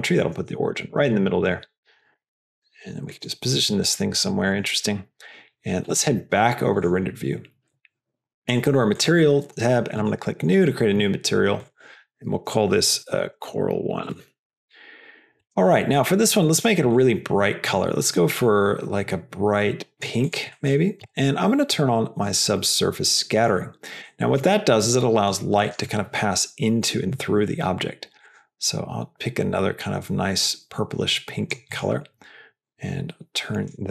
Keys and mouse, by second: 0.5 s, 1.0 g, 1.6 s, 2.4 g, 3.5 s, 4.1 g, 6.7 click, 8.3 click, 10.3 click, 11.5-14.6 drag, 15.8 middle click, 16.9 click, 20.2 drag, 20.4 middle drag, 22.0-23.6 drag, 24.1 middle click, 24.7 click, 32.4-33.6 drag.